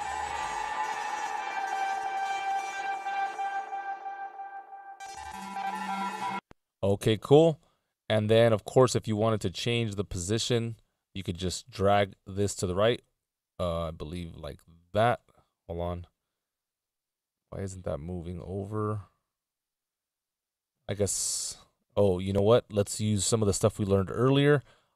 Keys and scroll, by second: 6.4 space, 20.6 Left.